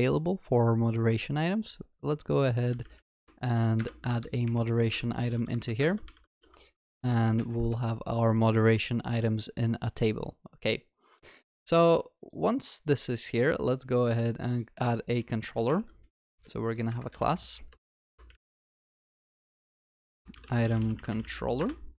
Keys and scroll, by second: 3.8 Return, 5.0 ctrl+w, 5.2 ctrl+c, 5.8 ctrl+c, 5.8 ctrl+w, 6.9 ctrl+v, 7.0 ctrl+s, 15.7 alt+Insert.